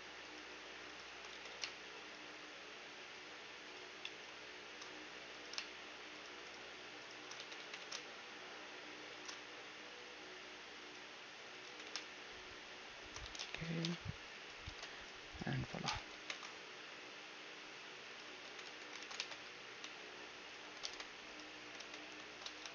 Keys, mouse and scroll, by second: 1.4 s, 4.0-4.8 scroll up 1, 4.8-6.2 middle drag, 5.3-9.1 right drag, 5.3 z, 7.4 z, 7.6 s, 9.4 z, 11.7 s, 13.2 z, 13.4-15.4 middle drag, 13.8 ctrl+Tab, 14.3-16.3 ctrl+super+drag, 14.6 ctrl+Tab, 15.6-17.5 ctrl+super+right drag, 16.3 ctrl+shift+e, 18.5 w, 19.0 ctrl+e, 19.8 x, 20.8 ctrl+Tab, 21.8 ctrl+z, 22.6 alt+shift+s.